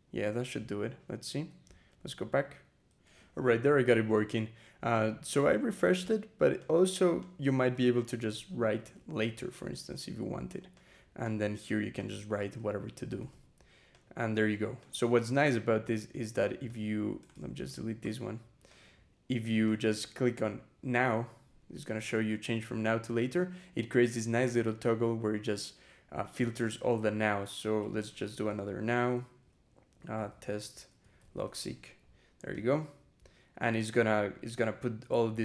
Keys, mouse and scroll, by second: 0.1-0.7 scroll up 2, 1.1 Escape, 2.9 e, 4.8 click, 5.6 click, 6.4 click, 7.1 click, 7.4 Return, 8.1-9.5 typing, 9.7 Return, 10.6 click, 11.1 click, 11.8 click, 12.2-13.6 typing, 13.8 click, 14.6 click, 15.0 Escape, 15.3 BackSpace, 16.5 click, 17.2 ctrl+a, 17.5 ctrl+BackSpace, 18.5 ctrl+click, 19.5 click, 24.9 scroll down 2, 26.4 click, 26.8 Return, 27.6-32.0 typing, 32.4 click.